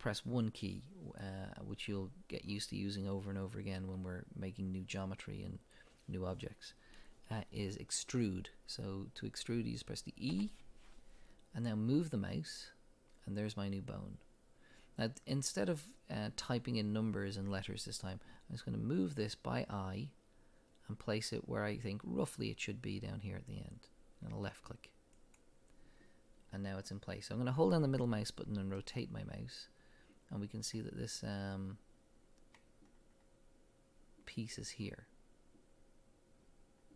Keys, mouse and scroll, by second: 10.3 e, 25.4 click, 28.8-36.9 middle drag.